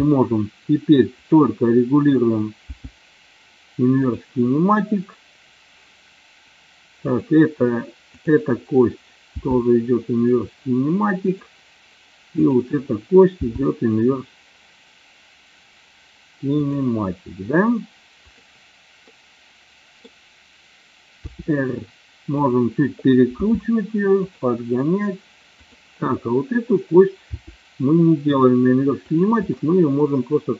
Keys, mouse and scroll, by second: 1.3 click, 2.8 g, 4.1 click, 7.1 click, 8.3 click, 9.5 g, 12.4 click, 13.4 g, 16.6 click, 18.3 click, 19.1 middle click, 21.3 r, 22.4 click, 23.6 g, 24.2 click, 25.7 click, 27.3 r, 29.7-30.5 middle drag.